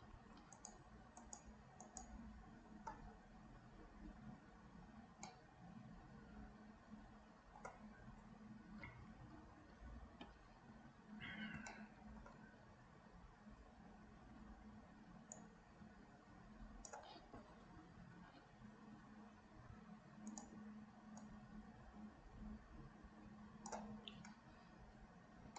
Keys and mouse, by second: 1.3 shift+click, 1.8 shift+click, 5.4-7.8 middle drag, 9.4 KP_1, 11.8 shift+middle click, 15.5-17.0 drag, 18.5 ctrl+z, 19.7 f, 21.2-23.9 drag.